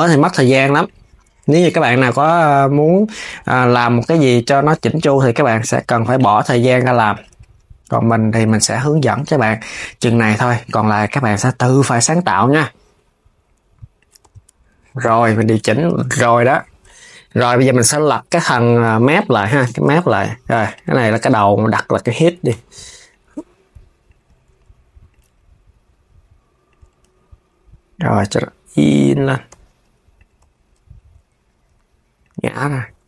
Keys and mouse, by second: 1.0 click, 1.3 KP_3, 1.8 r, 5.1 click, 5.8 click, 6.6 click, 6.9 g, 8.6 click, 10.3 click, 12.6 s, 13.9 KP_3, 14.4 s, 15.5 s, 16.0 click, 20.4 click, 20.8 click, 21.0-22.8 drag, 23.0 s, 23.7 click, 24.2 Tab, 24.7 click, 25.3 s, 26.7 z, 29.1 g, 30.0 KP_1, 30.8 r, 32.9 KP_3.